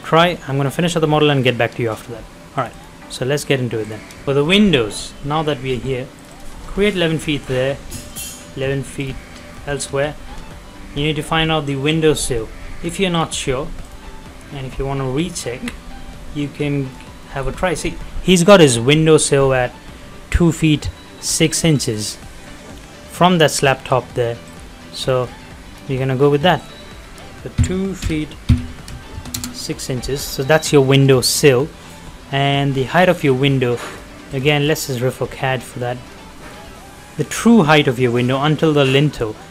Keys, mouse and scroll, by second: 0.5 middle click, 0.9-1.2 scroll down 1, 1.2 middle click, 1.3 middle click, 1.9 shift+middle click, 2.5 click, 3.2 middle click, 3.2 middle click, 3.9 click, 3.9 click, 4.2 shift+middle click, 6.1 click, 6.8 middle click, 8.2 ctrl+click, 8.7 ctrl+click, 9.3 middle click, 10.0-10.3 scroll up 1, 13.1 click, 15.3 middle click, 15.9-16.2 scroll up 1, 16.8 middle click, 16.9-17.2 scroll down 1, 17.2 middle click, 21.7 middle click, 22.0 scroll down 1, 22.2 middle click, 24.4 click, 24.8 scroll down 1, 25.6 scroll up 1, 26.6 ctrl+click, 29.2 shift+', 29.4 Return, 30.2 scroll down 1, 30.5 middle click, 31.4 shift+scroll down 1, 31.6 middle click, 32.1 scroll up 1, 33.9 click, 34.0 click, 34.6-35.0 scroll down 1, 35.5-35.9 scroll up 1, 35.9 middle click, 36.1 scroll down 1, 36.7-37.1 scroll up 1, 37.1 middle click, 37.7 scroll down 1, 38.0 middle click.